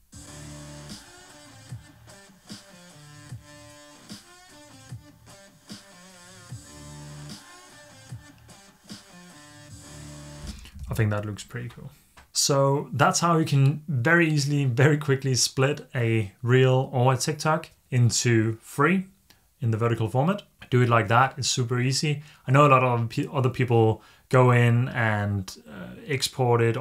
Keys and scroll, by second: 10.8 super+s.